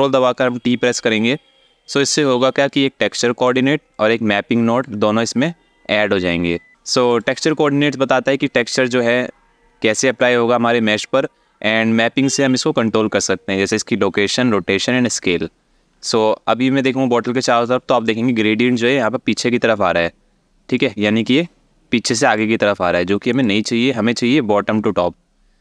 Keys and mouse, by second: 1.5 click, 2.4-3.1 drag, 3.6-4.5 drag, 6.7 click, 15.7-17.7 alt+middle drag, 20.5-22.0 drag, 23.0 click.